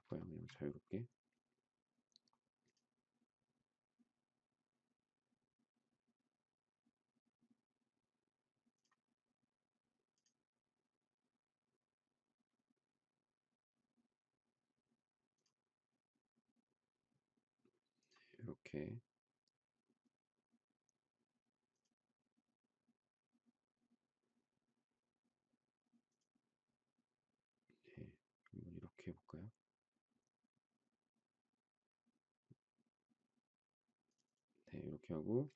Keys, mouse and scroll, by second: 0.2 shift+middle click.